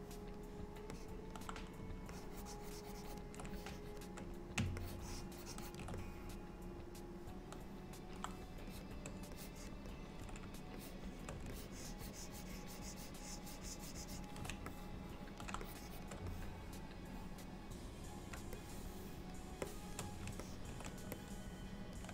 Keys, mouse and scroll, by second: 1.0 middle click, 2.2 ctrl+click, 3.6 shift+click, 4.9 ctrl+click, 6.0 middle click, 8.8 shift+click, 9.4 click, 10.8 shift+click, 11.6 ctrl+click, 12.7 ctrl+click, 14.8 middle click, 15.7 shift+click, 16.4 middle click, 18.6 shift+middle click, 19.7 shift+middle click, 20.5 ctrl+middle click, 21.2 middle click.